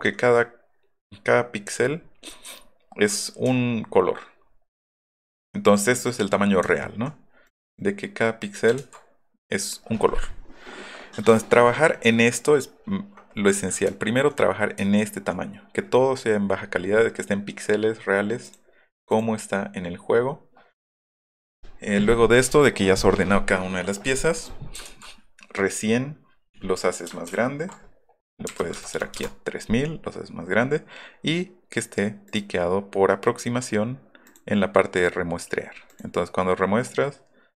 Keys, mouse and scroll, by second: 1.8-2.7 alt+scroll up 4, 3.6 alt+middle click, 4.4 alt+middle click, 4.8 alt+middle click, 5.0-6.7 alt+scroll up 8, 6.8 alt+middle click, 7.5 click, 7.8 click, 8.8 ctrl+z, 11.4 scroll up 1, 14.9 alt+scroll up 1, 18.4 click, 19.1 click, 24.0 click, 24.9 ctrl+z, 27.3 ctrl+alt+i, 28.6 KP_3, 28.8 KP_0, 32.3 click, 34.3 click, 35.9 click.